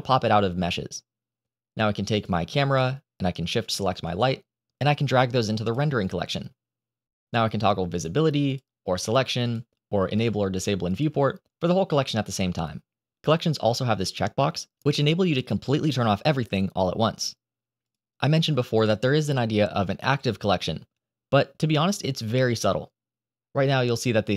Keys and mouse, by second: 2.0 click, 3.5 shift+click, 4.7 click, 8.3 middle click, 8.9 click, 9.3 click, 10.0 click, 10.8 click.